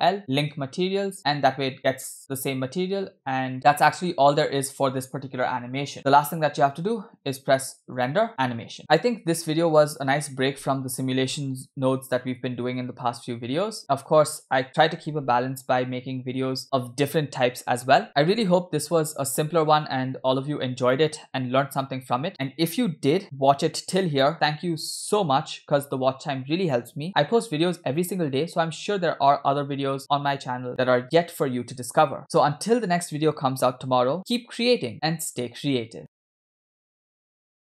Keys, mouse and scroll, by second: 1.7 space, 5.8 space, 5.9 space, 8.0-8.8 drag.